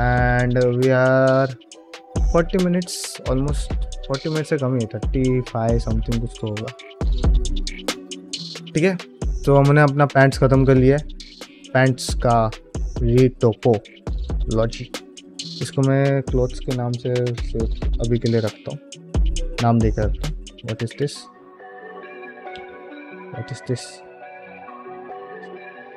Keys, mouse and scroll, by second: 0.6 ctrl+middle click, 0.9 shift+middle click, 2.0 ctrl+shift+middle click, 2.7 ctrl+space, 3.2 shift+middle drag, 5.9 ctrl+middle click, 6.0 shift+middle click, 6.4 ctrl+middle click, 6.8 shift+middle click, 7.2-7.9 middle drag, 8.2-8.8 middle drag, 11.1 middle drag, 11.5 shift+middle click, 11.7 middle drag, 12.4 click, 15.0 F2, 20.8 click, 21.6-21.9 middle drag, 22.4 KP_Decimal, 23.1-23.4 middle drag, 23.6 alt+z, 25.6 KP_Decimal.